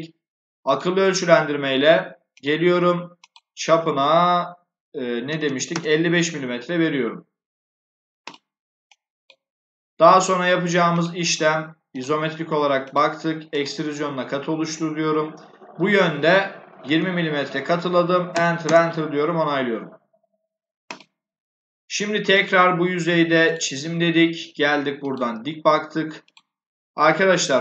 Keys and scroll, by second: 5.1 5, 5.6 Return, 16.4-17.2 typing, 18.2 Return.